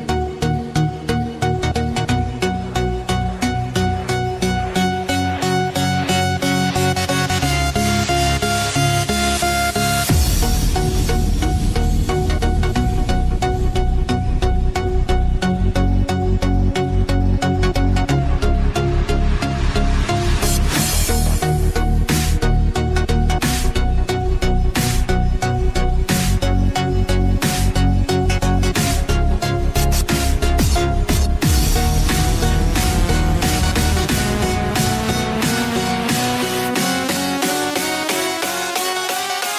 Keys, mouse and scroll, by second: 2.1 click, 9.3 click, 24.7-26.0 scroll up 1, 26.0 click, 32.8-33.2 scroll up 1, 33.9-36.2 typing, 35.0 click, 35.8 click, 37.0 scroll down 1, 38.4 typing, 38.8 click.